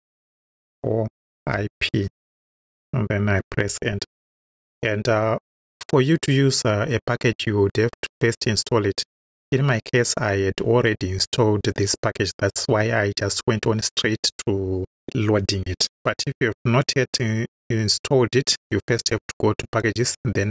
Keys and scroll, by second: 0.6 shift+o, 1.5 shift+i, 2.1 shift+p, 3.7 Return.